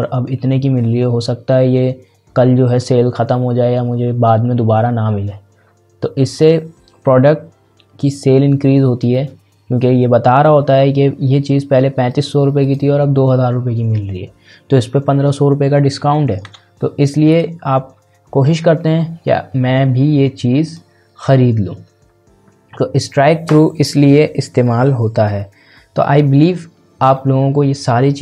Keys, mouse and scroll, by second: 9.1-12.1 drag, 17.3 click, 20.6 click, 22.0 scroll up 1, 24.3 scroll, 24.5 scroll down 1, 25.5 scroll up 1.